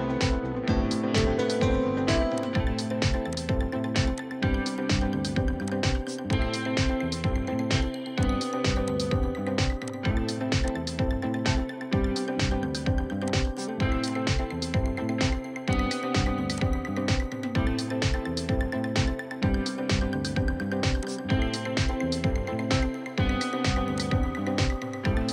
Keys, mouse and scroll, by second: 3.4 ctrl+click, 4.2 ctrl+click, 6.7 scroll up 1, 6.8 middle click, 8.2 ctrl+click, 9.9 ctrl+click, 10.7 ctrl+click, 14.5-15.2 scroll up 1.